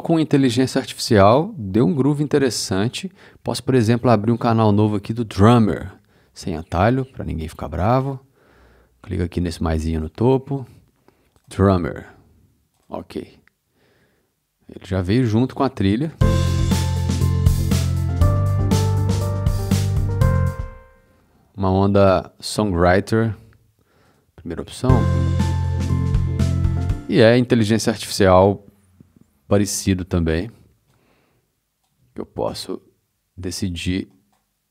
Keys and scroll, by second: 16.0 space, 24.8 space, 26.7 space.